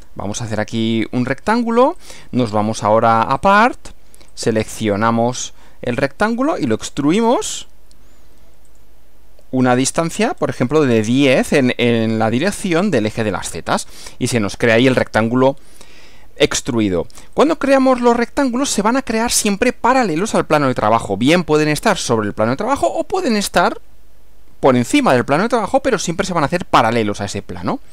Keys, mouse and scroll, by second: 0.0 click, 2.1 click, 3.4 click, 4.4 click, 6.3 click, 8.7 click, 9.7-10.1 scroll up 2, 10.3-10.9 scroll up 2, 12.7 click, 13.5 click, 17.4 click, 18.0 click.